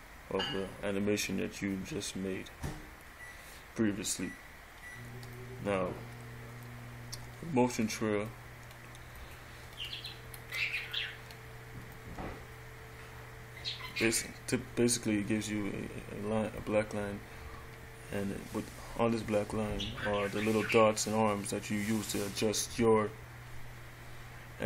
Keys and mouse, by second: 5.5-6.9 middle drag, 7.0 middle click, 8.6 middle click, 11.2 middle click, 11.3 middle click, 17.8-19.6 middle drag.